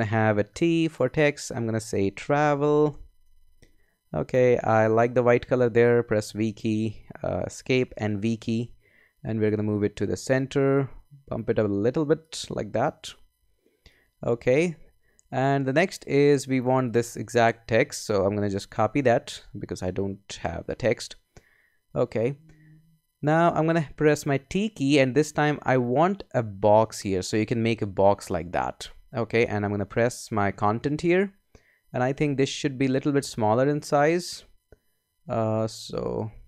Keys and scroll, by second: 0.5 t, 1.7-4.3 typing, 6.2 v, 7.3 BackSpace, 7.7 Escape, 8.1 v, 17.7 super+a, 18.7 super+c, 21.8 Escape, 24.5 t, 29.9 super+v, 32.1 super+a.